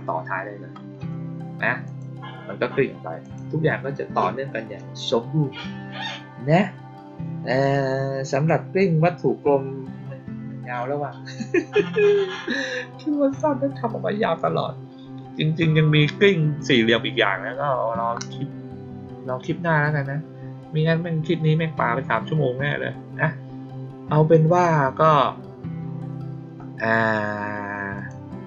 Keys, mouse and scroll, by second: 1.7 click, 3.1 click, 8.2 click, 27.9 click.